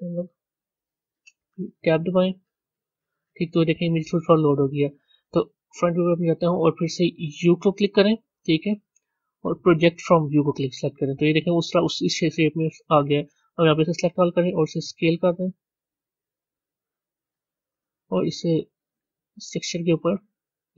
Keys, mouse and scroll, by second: 0.0-2.5 drag, 2.5 b, 5.5 KP_1.